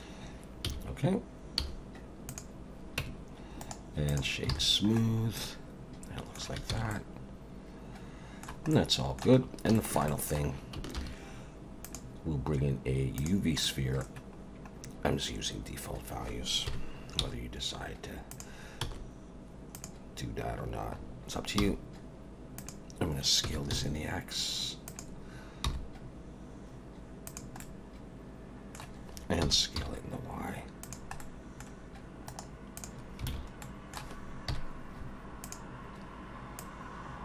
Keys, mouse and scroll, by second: 0.6 z, 1.6 z, 3.0 Tab, 3.6 right click, 4.5 alt+a, 4.7-5.2 scroll down 7, 5.4 middle click, 6.7 ctrl+s, 6.9 middle click, 8.7 middle click, 9.4 scroll down 1, 9.7 shift+middle click, 10.1 middle click, 11.0 shift+a, 13.6 middle click, 14.8 scroll down 2, 16.7 KP_1, 17.2 g, 18.8 s, 21.0 scroll up 4, 21.6 g, 23.4 s, 25.6 g, 27.6 middle click, 29.4 s, 31.2 middle click, 32.3 right click, 33.3 alt+a, 33.6 middle click, 34.5 KP_1, 35.4 click, 36.6 click.